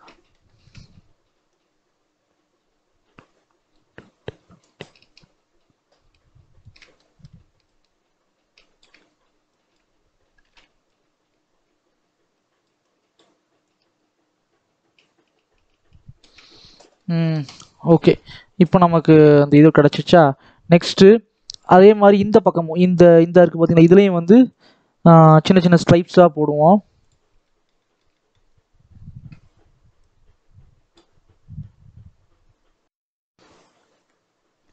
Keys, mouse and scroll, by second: 1.4-6.8 drag, 6.8 middle click, 7.6-10.4 shift+drag, 10.4 ctrl+z, 10.7-16.3 shift+drag, 16.3-16.6 scroll down 3, 16.6-18.4 middle drag, 18.4 scroll up 2, 18.6 scroll down 1, 18.8 middle click, 19.2 scroll up 1, 19.4 middle click, 19.8-20.8 scroll down 2, 25.1 middle click, 25.4-25.7 scroll up 3, 25.7 shift+middle click, 26.0-27.0 scroll up 1, 27.0 click, 27.3-28.4 middle drag, 28.4-29.2 scroll up 1, 30.2-34.7 drag.